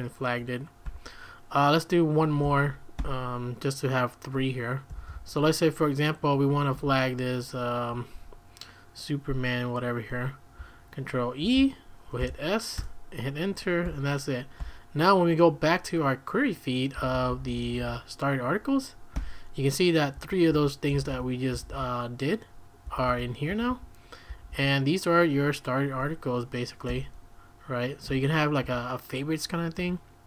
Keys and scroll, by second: 0.8 q, 2.4-3.7 typing, 4.9 typing, 6.7 l, 11.4 ctrl+e, 12.2 s, 12.8 Return, 13.8 q, 14.6 q, 16.9-17.6 typing, 18.9-24.5 typing, 26.9 typing, 28.1-28.6 typing, 29.7-30.2 typing.